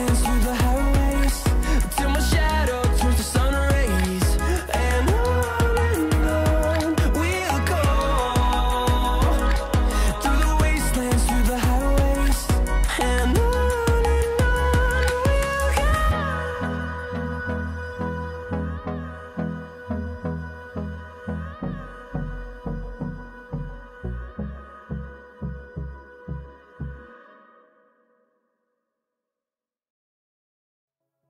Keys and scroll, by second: 11.2 space.